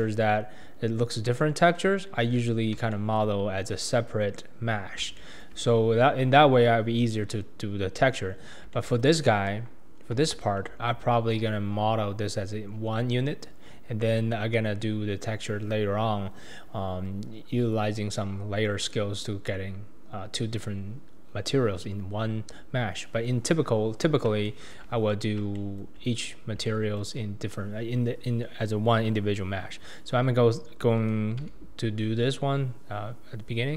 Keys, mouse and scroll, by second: 0.7-2.5 scroll down 2, 2.5-2.9 scroll down 3, 2.9-3.4 shift+middle drag, 3.4-4.7 scroll up 4, 4.7-5.2 scroll down 3, 5.2-5.6 shift+middle drag, 5.6-7.7 scroll up 7, 7.7-8.3 scroll up 4, 8.3-8.7 scroll down 2, 8.7-9.5 middle drag, 9.5 KP_1, 9.9 scroll down 3, 10.2-13.3 shift+middle drag, 24.0-24.4 scroll down 2, 24.4-24.9 shift+middle drag, 24.9-26.7 scroll up 7, 25.6-26.0 shift+middle drag, 26.7-27.0 shift+middle drag, 27.0-27.6 shift+scroll up 1, 28.0-30.3 scroll up 2, 30.3-31.1 scroll up 1, 31.4 s.